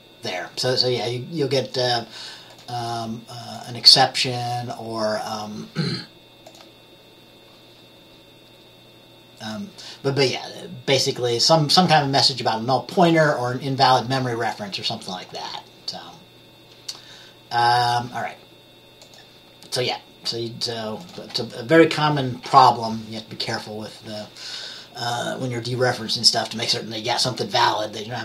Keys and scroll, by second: 22.5-23.4 typing.